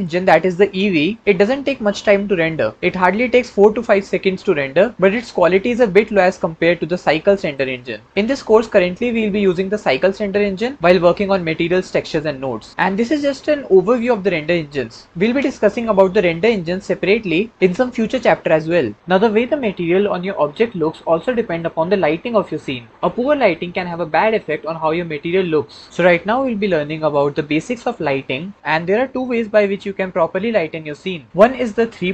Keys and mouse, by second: 6.8-7.5 drag.